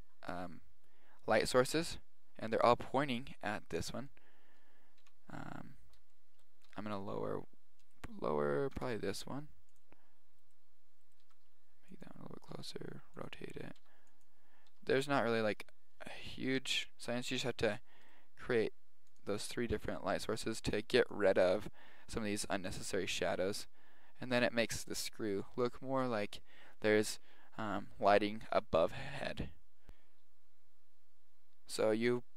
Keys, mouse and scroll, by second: 3.5-5.1 middle drag, 5.1 KP_3, 6.7 g, 6.9 click, 8.7 right click, 8.8 g, 9.0-9.3 right drag, 9.4 right click, 9.9-10.2 right drag, 10.6 right click, 11.5 g, 12.6 r, 13.9 g, 14.3 right click, 14.9 r, 16.6 KP_7, 18.3-18.7 right drag, 18.7 g, 19.2 click, 19.5 r, 19.9 click, 20.4 right click, 20.6 g, 21.2 click, 23.9 right click, 29.5-29.8 right drag, 29.8 Tab.